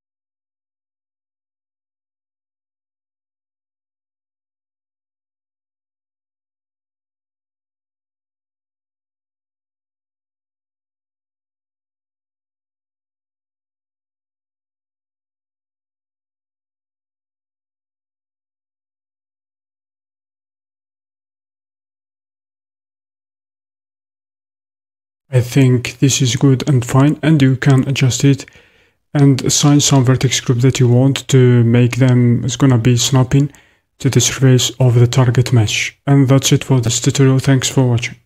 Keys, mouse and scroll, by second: 11.4-19.8 drag.